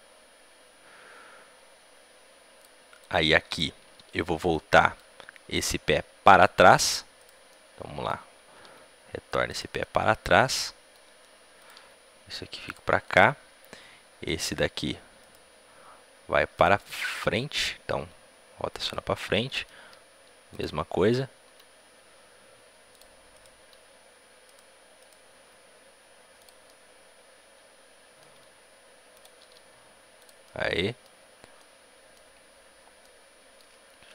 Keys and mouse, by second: 2.8-4.7 drag, 4.4-6.1 middle drag, 5.5-9.3 right drag, 6.1 r, 8.5 r, 9.7-11.5 drag, 11.5-13.5 right drag, 11.7 r, 12.9-15.1 drag, 15.1-16.7 right drag, 15.6 r, 17.9 r, 19.1-22.2 drag, 19.7 s, 21.4 r, 23.3-24.9 drag, 23.3-26.5 right drag, 25.3 r, 26.5-28.2 drag, 28.2 r, 29.3-32.9 drag, 29.3 s, 32.9-34.1 middle drag.